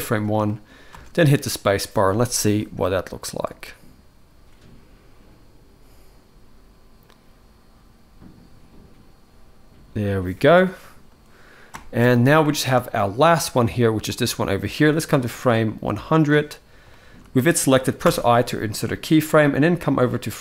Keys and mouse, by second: 0.2-0.6 shift+middle drag, 0.6 space, 11.5 space, 12.2 middle click, 12.7-13.9 shift+middle drag, 13.9 click, 14.9-16.0 drag, 16.7 shift+middle click, 17.8 i, 19.0-20.3 drag.